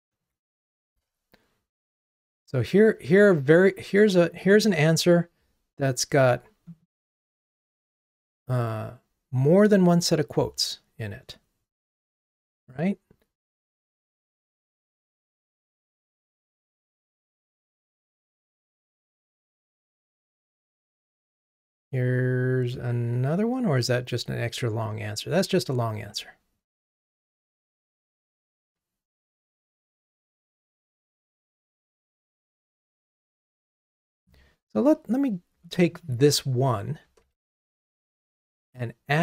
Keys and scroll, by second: 37.7 super+c.